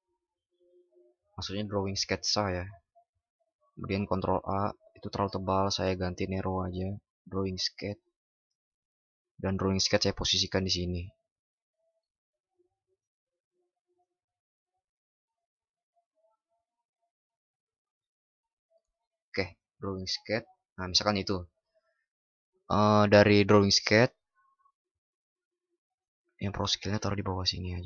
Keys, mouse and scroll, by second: 3.9 ctrl+shift+@.